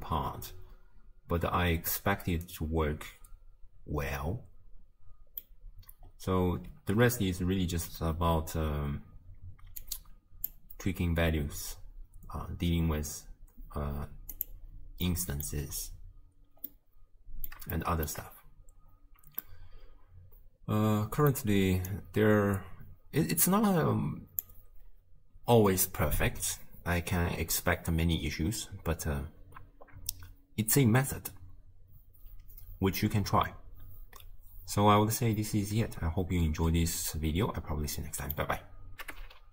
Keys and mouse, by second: 6.8 shift+space, 9.9 click, 14.4 click, 15.1 middle click, 16.8-17.6 middle drag, 17.9 shift+middle click, 19.4-21.3 middle drag, 21.9 click, 24.2 click, 38.0 click.